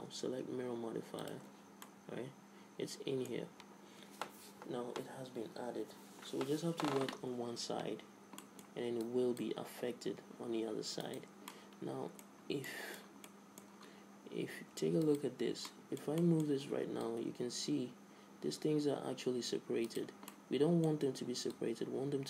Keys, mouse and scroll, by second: 0.0-1.9 drag, 2.0-3.9 middle drag, 7.3 Tab, 8.6 middle click, 9.2 click, 9.3 right click, 10.1-11.2 right drag, 11.7-15.2 middle drag, 14.1 z, 15.2 right click, 15.6 click, 15.6 z, 16.6-19.2 drag, 20.5-22.2 middle drag.